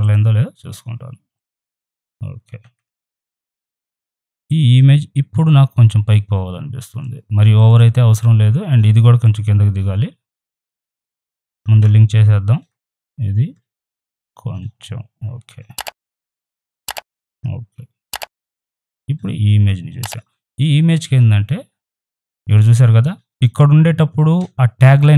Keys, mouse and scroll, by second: 0.0 click, 2.6 ctrl+d, 4.2 right click, 4.4-7.5 drag, 7.5 right click, 7.7 click, 8.7 right click, 8.9-11.1 drag, 11.1 right click, 11.3 ctrl+click, 11.6 ctrl+z, 14.2 Down, 16.3 shift+right click, 16.5-18.2 shift+drag, 18.2 right click, 18.4-20.3 drag, 20.3 right click, 20.5 click.